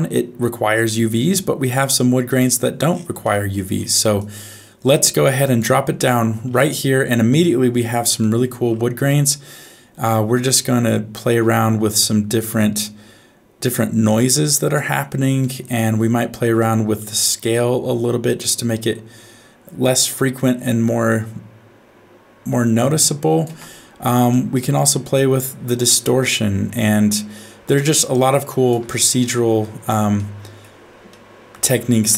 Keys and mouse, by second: 3.2 middle click, 4.2-5.6 drag, 8.3 middle click, 10.5-14.8 drag, 15.4 middle click, 16.7-23.4 shift+drag, 24.5-28.7 shift+drag, 30.1 middle click, 31.1 shift+middle click.